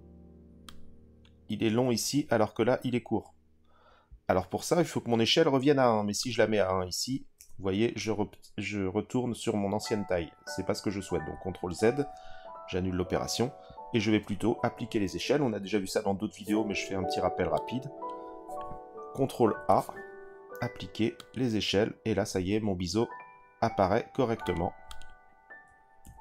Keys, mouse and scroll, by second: 0.6-2.1 drag, 6.2-7.4 drag, 11.5 ctrl+z, 17.5 click, 19.4 ctrl+a, 24.4-26.2 drag.